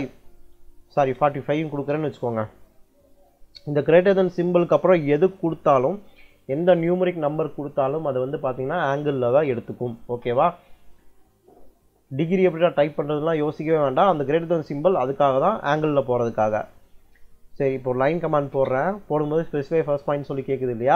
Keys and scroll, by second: 1.0 BackSpace, 1.6 4, 18.0 l, 18.4 space.